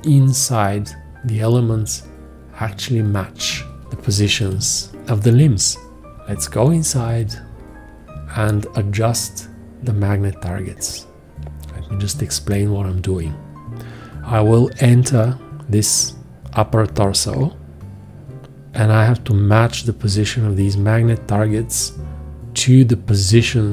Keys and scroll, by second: 3.8 ctrl+space, 4.1 ctrl+space, 7.0 F2.